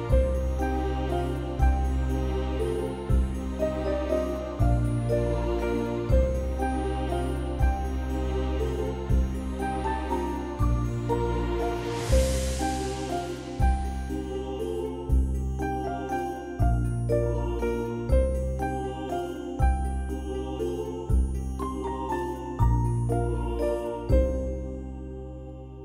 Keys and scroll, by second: 1.3 space, 10.3 ctrl+0.